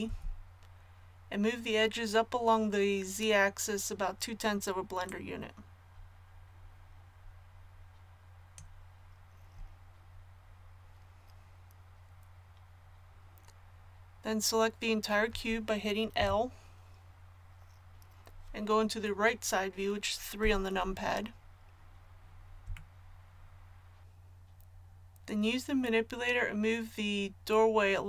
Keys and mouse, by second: 0.0 z, 5.0-8.5 middle drag, 16.2 l, 20.4 KP_3, 22.9 middle click.